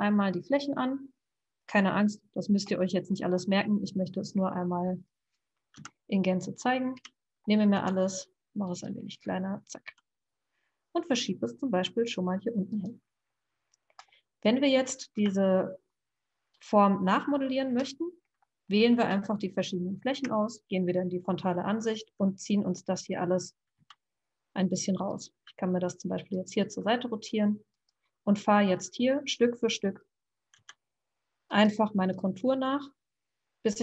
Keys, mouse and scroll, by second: 3.1-6.9 middle drag, 6.9 KP_1, 7.8 s, 9.9 g, 14.3 middle click, 15.1 KP_1, 16.5 click, 18.1 middle click, 19.0 click, 20.3 KP_1, 22.0 e, 23.8 s, 25.3 r, 26.6 g, 28.6 e, 30.5 r, 31.9 g.